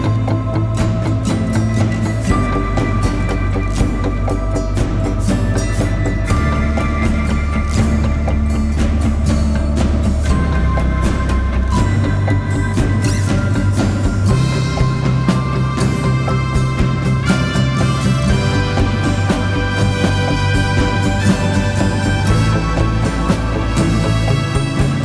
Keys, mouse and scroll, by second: 23.2-24.3 scroll up 1, 24.7-25.0 scroll down 1.